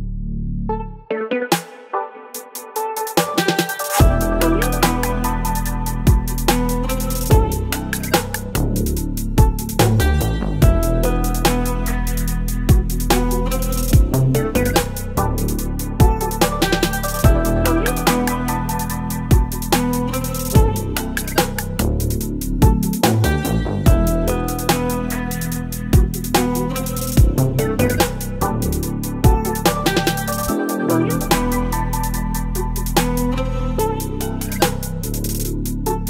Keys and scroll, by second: 1.0 ctrl+BackSpace, 1.5 space, 2.7 ctrl+BackSpace, 4.4 Delete, 5.0 Delete, 6.8 Delete, 7.4 Delete, 9.1 ctrl+BackSpace, 10.4 Delete, 11.3 ctrl+BackSpace, 11.8 space, 14.9 Delete, 16.4 Delete, 18.1 ctrl+BackSpace, 19.2 Delete, 20.4 ctrl+BackSpace, 22.8 Delete, 23.5 space, 25.7 Delete, 27.6 v, 29.1 l, 30.7 Delete, 31.7 ctrl+BackSpace, 32.4 ctrl+BackSpace, 33.2 BackSpace, 33.9 space, 35.6 ctrl+BackSpace.